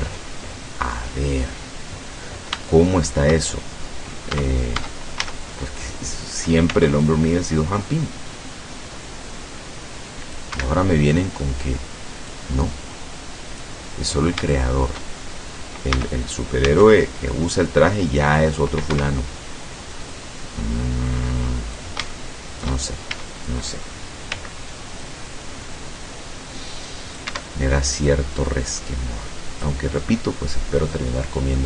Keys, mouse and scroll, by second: 0.0-0.5 scroll up 2, 0.5-0.8 scroll down 2, 1.0-2.6 drag, 2.7 shift+click, 3.6 shift+click, 4.4 Tab, 5.3 a, 5.5-6.0 scroll up 1, 6.8 c, 7.1-10.6 drag, 10.6 Escape, 10.8 middle click, 12.3-13.8 drag, 14.0 scroll down 2, 14.5 shift+middle click, 16.0 a, 16.7 c, 16.8-18.8 drag, 19.0 Escape, 20.2-22.0 drag, 22.2 shift+middle click, 23.1 shift+a, 24.4 c, 25.1-27.5 drag, 27.4 Escape, 28.2-29.9 drag, 30.0 scroll down 2, 30.3 click, 31.2 scroll down 2.